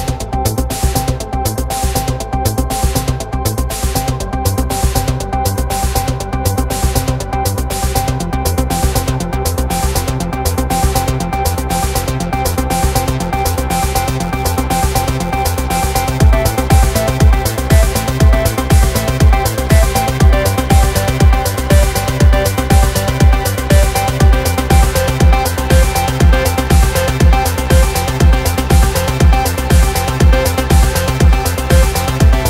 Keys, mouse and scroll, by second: 0.0 drag, 0.6 scroll up 7, 1.9-3.0 right drag, 3.9 click, 4.6 right click, 7.8 ctrl+shift+click, 10.0 click, 11.1-12.4 drag, 13.9-15.4 drag, 16.3 click, 18.0-19.0 ctrl+shift+drag, 19.4-21.2 drag, 24.3-25.8 drag, 27.2-29.8 drag.